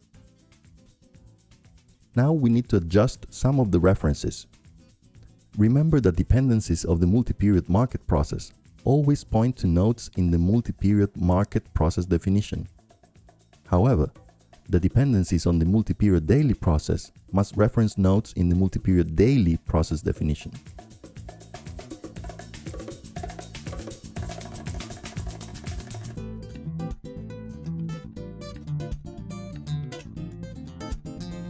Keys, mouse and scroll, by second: 3.1-5.3 drag, 6.3-9.1 drag, 9.8-10.9 drag, 11.0-18.2 drag, 12.1 ctrl+Left, 12.2 ctrl+Left, 12.8 ctrl+Left, 13.3 ctrl+Left, 13.9 ctrl+Left, 14.2 ctrl+Up, 14.4 ctrl+Up, 14.5 ctrl+Up, 14.6 ctrl+Up, 14.8 ctrl+Up, 15.0-15.3 ctrl+scroll up 2, 15.7 ctrl+Up, 19.7-21.3 drag, 22.2-24.9 drag, 23.1 ctrl+Left, 25.4-27.3 drag, 28.2-29.3 drag, 30.2-31.3 drag.